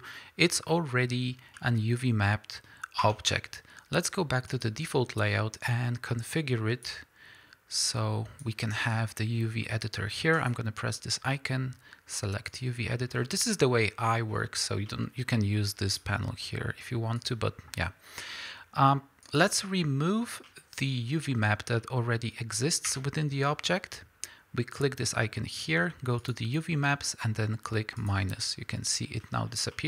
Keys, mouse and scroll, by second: 0.7-1.0 middle drag, 3.5 Tab, 4.5-14.1 drag, 14.1-15.9 middle drag, 14.6 scroll down 2, 15.9 click, 17.2 click, 20.5-21.4 middle drag, 21.5 scroll up 2, 21.8-28.1 middle drag, 22.9 Tab, 28.1-29.7 drag, 29.7-29.8 middle drag.